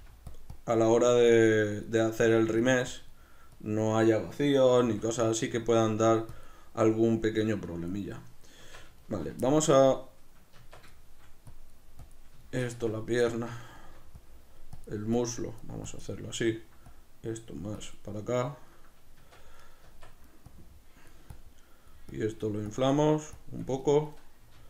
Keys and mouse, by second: 0.0 middle click, 0.4 click, 4.8 q, 5.4 shift+middle click, 5.8 click, 8.6 b, 8.8 click, 9.0-11.5 shift+middle drag, 10.6 Tab, 11.5 click, 12.4 shift+middle click, 12.8 b, 12.8 Tab, 13.1 right click, 13.3 Tab, 13.5 b, 13.8 shift+middle click, 14.2 click, 18.5-19.6 ctrl+middle drag, 19.2 b, 19.3 Tab, 19.6 right click, 19.8 Tab, 20.0 b, 20.5 click, 23.8 shift+middle click, 24.5 q.